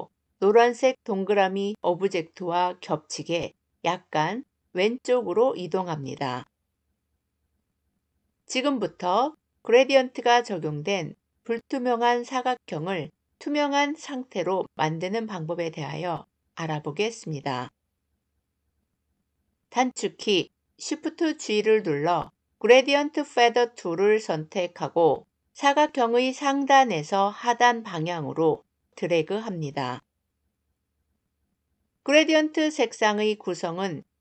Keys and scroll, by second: 19.7 shift+g.